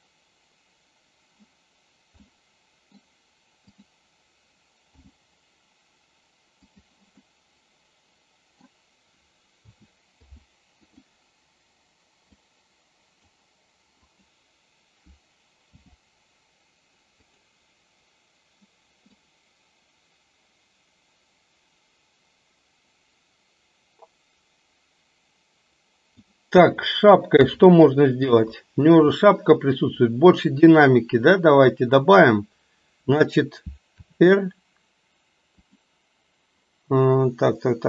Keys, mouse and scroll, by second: 2.3-3.0 middle drag, 3.7 click, 4.8 g, 7.3-8.8 middle drag, 9.7 a, 10.2 i, 12.4 click, 14.1 click, 15.7 g, 19.2-26.3 drag, 27.4 KP_3, 28.6-29.1 shift+middle drag, 34.0 r.